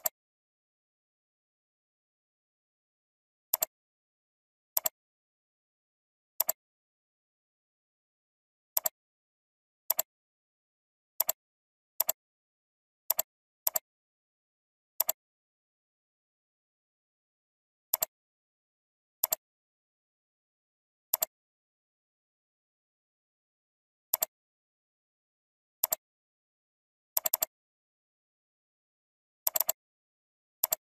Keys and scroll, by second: 6.5 ctrl+t.